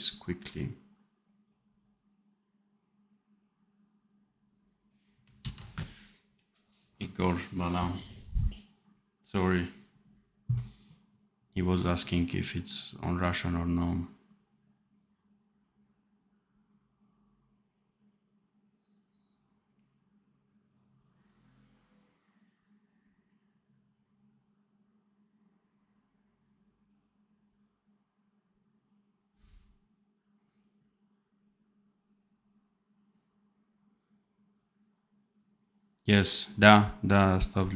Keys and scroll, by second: 5.4 ctrl+s.